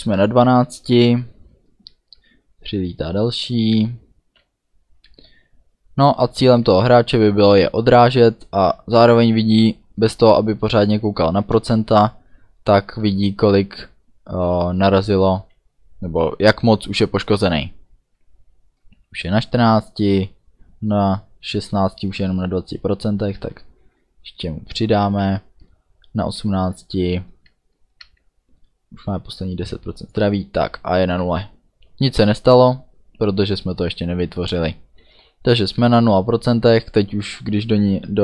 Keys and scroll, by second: 2.7 a, 3.9 d, 7.5 a, 13.0 d, 14.0 a, 23.3 d, 25.2 a, 27.4 d.